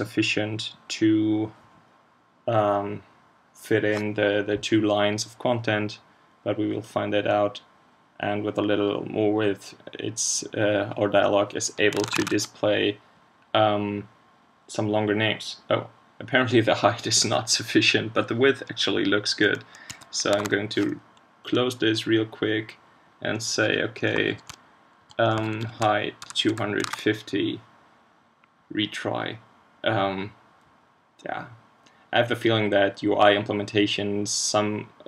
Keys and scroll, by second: 12.0 super+Tab, 20.4 super+q, 26.8 super+s.